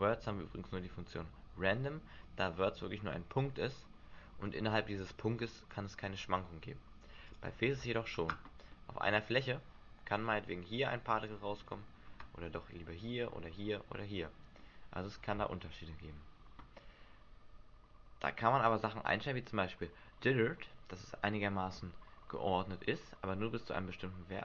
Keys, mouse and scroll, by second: 7.3 click, 8.7 middle click, 14.5 middle click.